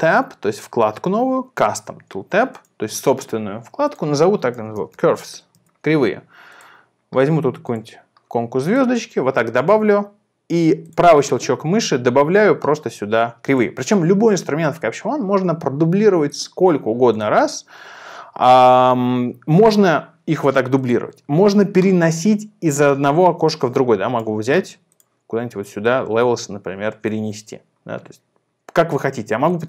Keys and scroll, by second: 4.4-6.2 typing.